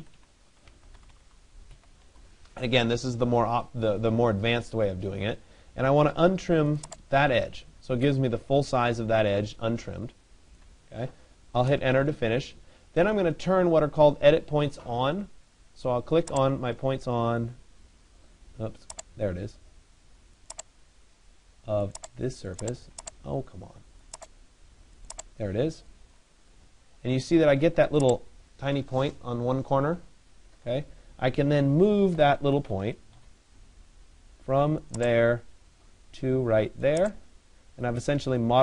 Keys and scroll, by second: 25.7 Return, 32.8 Return.